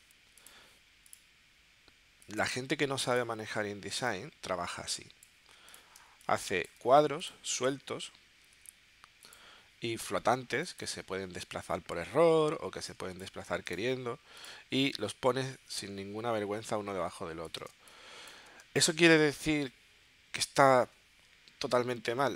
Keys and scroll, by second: 6.0 space, 8.5 w, 10.2 w, 14.8 w, 15.3 w, 17.7 space.